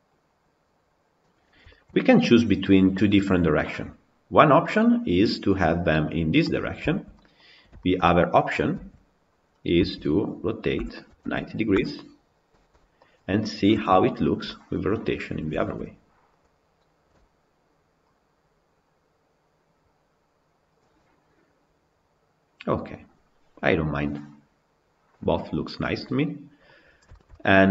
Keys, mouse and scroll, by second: 1.2-1.5 scroll up 1, 1.5-6.2 shift+middle drag, 6.2-6.7 scroll down 6, 6.7-7.3 shift+middle drag, 7.3-7.6 scroll down 3, 7.6-8.3 shift+middle drag, 8.3 click, 8.7 Tab, 9.6 a, 10.8 r, 12.5 Tab, 12.9 click, 13.6 KP_Decimal, 14.6-15.1 middle drag, 15.1-15.4 scroll up 1, 15.4-20.1 shift+middle drag, 20.1-20.8 drag, 20.8-23.8 middle drag, 26.9-27.7 shift+middle drag.